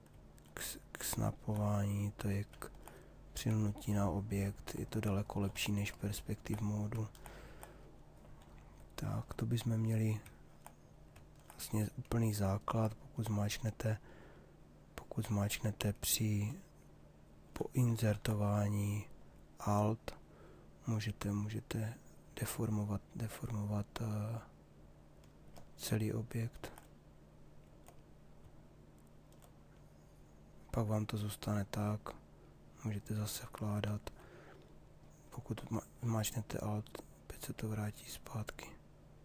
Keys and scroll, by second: 17.7 ctrl+z.